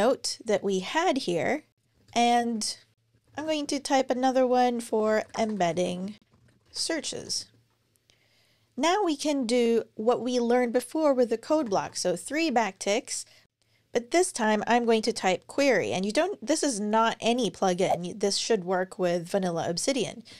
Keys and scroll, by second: 1.9 Return, 3.1 Up, 3.2 shift+3, 4.5-7.4 typing, 13.2-15.8 typing, 20.1 Return.